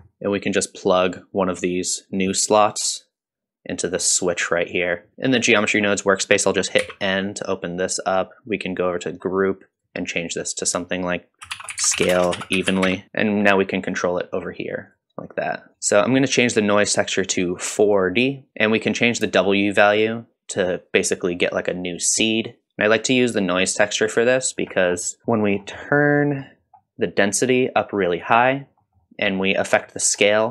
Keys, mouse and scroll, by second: 0.0 middle click, 0.5-1.1 drag, 1.9-4.0 drag, 8.7 click, 8.7 n, 9.8 click, 10.7-13.0 drag, 13.9 click, 14.9 click, 15.7 middle click, 15.7-16.9 scroll up 2, 15.7 n, 16.9-18.0 drag, 18.5 middle click, 19.4-20.5 shift+drag, 22.8-24.6 shift+drag, 25.2 middle click, 25.2 scroll down 2, 25.5-25.8 scroll up 1, 25.8 middle click, 26.2 middle click, 26.6-27.1 scroll up 1, 27.4 click, 28.8 middle click, 29.3 middle click, 30.0 scroll down 1.